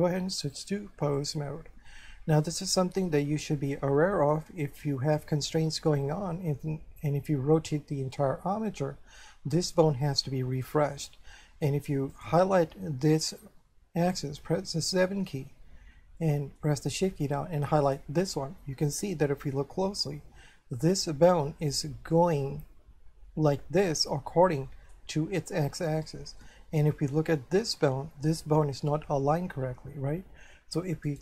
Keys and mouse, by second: 0.6 click, 2.0 shift+middle click, 3.7 shift+middle click, 12.1 right click, 14.4 7, 16.2 shift+middle click, 17.9 shift+right click, 19.0 shift+middle click, 24.3 shift+middle click, 26.4 shift+middle click, 31.1 right click.